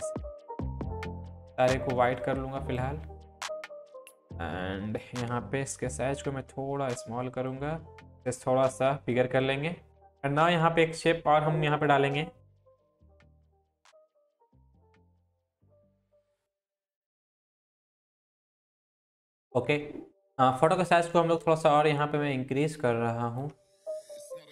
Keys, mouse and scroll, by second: 4.1-5.2 drag, 5.7 ctrl+t, 6.5-7.8 drag, 8.2 ctrl+t, 9.1-9.9 drag, 10.6 Up, 12.4 click, 13.3 click, 13.8-14.3 click, 14.6 scroll down 1, 14.8 drag, 17.0 ctrl+click, 17.5 click, 17.7 Up, 17.8 Left, 18.2 click, 18.5 scroll down 1, 18.7 scroll up 1, 21.2 click, 23.6-24.0 click, 24.0 click.